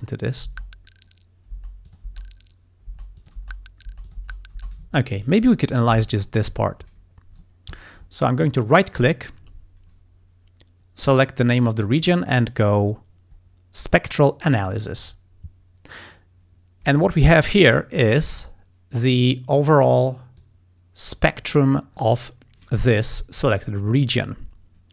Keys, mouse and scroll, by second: 0.5 space, 1.5 space, 1.9 click, 2.9 space, 3.2 click, 4.1 click, 4.9 ctrl+scroll up 1, 5.5 ctrl+click, 6.0 ctrl+s, 6.2 ctrl+click, 6.5 ctrl+scroll up 1, 7.8 ctrl+scroll down 1, 8.7 right click, 14.5 click, 20.4-21.9 drag.